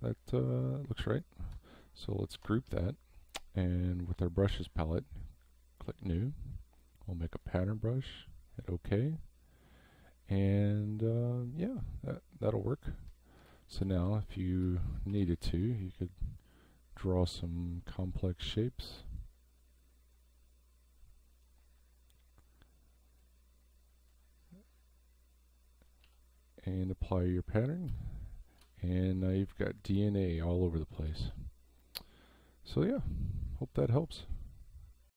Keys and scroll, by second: 2.3 ctrl+g, 13.5 space, 26.0 v, 27.9 space.